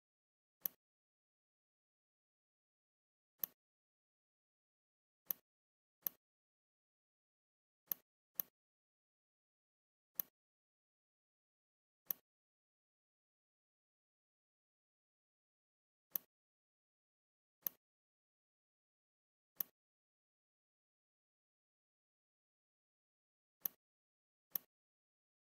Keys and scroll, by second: 7.2 Escape.